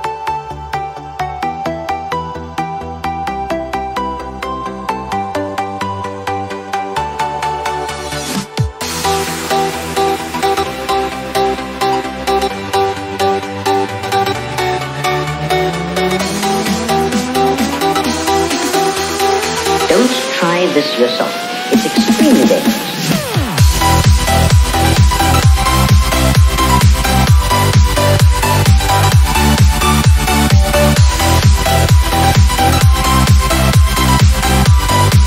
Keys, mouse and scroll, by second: 3.1 Right, 5.2 Up, 5.5 Right, 6.2 click, 6.5 Right, 7.9 click, 8.2 Right, 9.5 click, 10.4 Right, 12.1 click, 13.0-13.4 scroll down 1, 14.4 click, 15.0 Right, 16.9 click, 17.4 Right, 19.3 click, 19.5 Right, 20.5 scroll down 1, 21.7-23.3 drag, 28.9-32.1 drag.